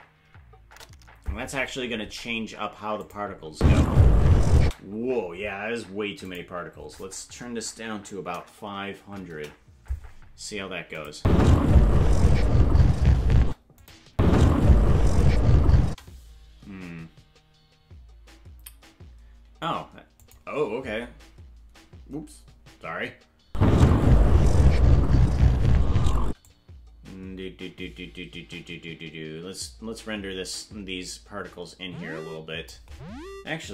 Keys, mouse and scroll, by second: 3.0 click, 3.5 space, 6.2-10.0 drag, 11.0 click, 11.1 space, 13.5 space, 13.8 click, 14.1 space, 20.2 click, 23.4 space, 26.5-32.7 drag.